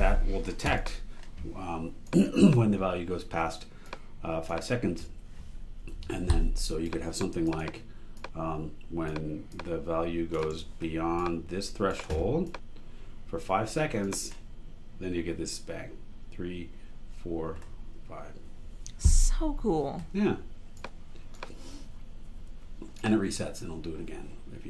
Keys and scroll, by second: 5.9 b, 10.5 super+e.